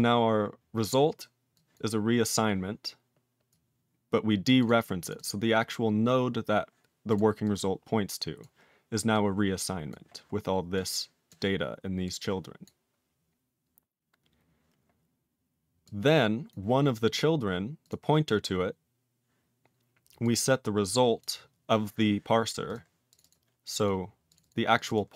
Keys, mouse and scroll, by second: 1.5 click, 1.7 click, 3.5 click, 4.4 click, 4.6 click, 4.6 click, 5.0 click, 5.1 click, 5.1 double click, 5.2 double click, 5.5 scroll up 2, 7.1 scroll up 1, 7.1 click, 7.4 click, 8.4 click, 9.1 click, 9.9 click, 10.7 click, 11.3 click, 12.0 click, 12.6 click, 15.8 click, 16.5 click, 17.1 click, 17.2 click, 17.8 click, 17.9 click, 20.2 click, 21.2 click, 22.6 click, 22.7 click, 23.1 click, 23.1 click, 23.2 double click, 23.3 double click, 23.6 click, 23.7 click, 23.7 double click, 23.8 double click, 24.3 click, 24.3 click, 24.4 double click, 24.5 double click, 24.8 click, 24.8 click, 24.8 double click, 24.9 double click, 25.1 click.